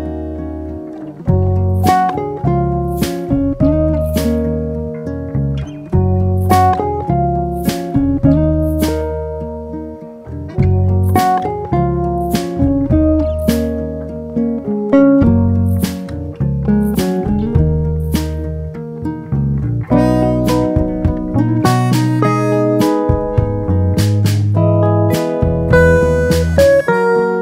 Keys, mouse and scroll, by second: 0.2 2, 0.8 alt+click, 2.1 ctrl+e, 3.8 click, 7.2 click, 7.9 e, 8.5 z, 10.3 click, 12.7 ctrl+r, 14.8 s, 16.3 click, 16.9 3, 19.4 alt+click, 21.3 e, 21.8 click, 22.4 s.